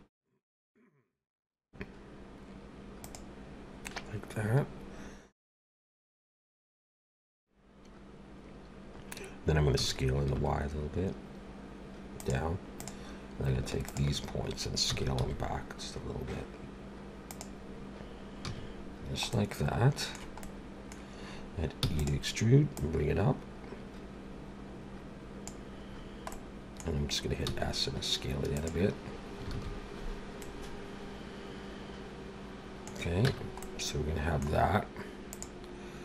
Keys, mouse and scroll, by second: 9.7 s, 12.8 click, 13.9 shift+click, 14.9 s, 18.4 a, 18.9 scroll down 1, 19.3 middle click, 20.4 middle click, 21.8 e, 22.7 click, 25.9-26.3 scroll down 2, 26.3 middle click, 27.5 s, 29.5 alt+a, 30.4 middle click, 33.2 Tab, 33.6 middle click, 35.3 click.